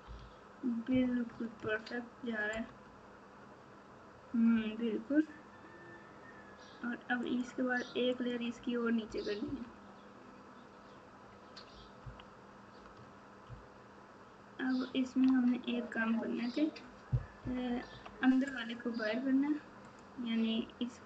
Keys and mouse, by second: 2.8 Tab, 7.2 click, 8.1 click, 9.4 KP_6, 12.0 KP_3, 13.4 ctrl+KP_6, 13.9 ctrl+KP_6, 17.4 KP_8, 19.8 click.